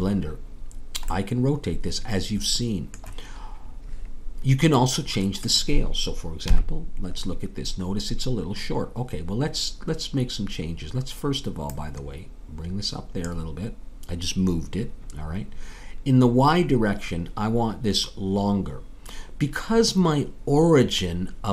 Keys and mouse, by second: 1.1-6.5 middle drag, 6.5 KP_3, 11.7-16.2 drag.